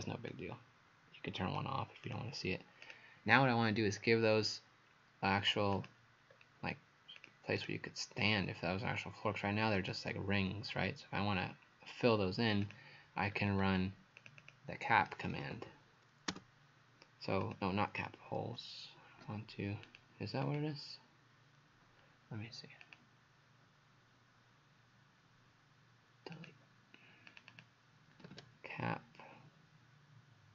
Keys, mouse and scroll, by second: 0.3 click, 2.1 click, 6.3-7.2 scroll down 1, 7.6 right click, 9.8 click, 13.3-13.8 scroll up 5, 14.2 click, 14.4 click, 15.0-16.1 typing, 16.3 Return, 17.4 click, 18.4 Delete, 19.9 click, 20.5 click, 22.8 click, 27.5 click, 28.0-28.8 typing.